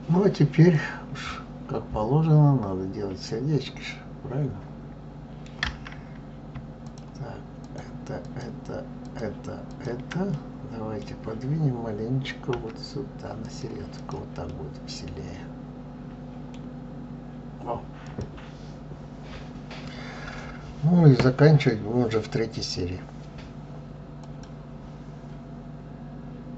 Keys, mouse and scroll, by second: 0.4-3.4 middle drag, 6.5 shift+click, 7.3 shift+click, 7.9 shift+click, 8.7 shift+click, 9.4 shift+click, 10.0-12.2 middle drag, 12.2 g, 13.7 click, 14.2-16.4 middle drag, 16.4-17.1 scroll down 3, 17.7 click.